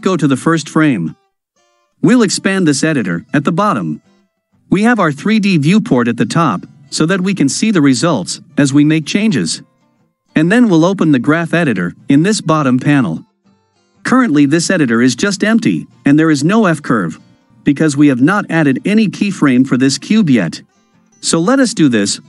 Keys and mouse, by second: 0.2 click, 2.2-3.8 drag, 3.8 click, 6.3 shift+middle click, 7.0-9.4 middle drag, 11.1-12.8 drag.